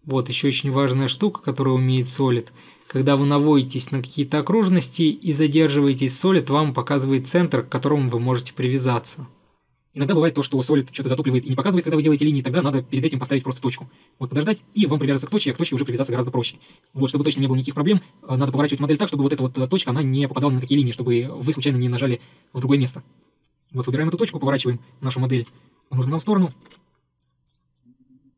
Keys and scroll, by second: 12.1 Escape, 12.2 Escape, 26.7 Escape, 26.8 Escape.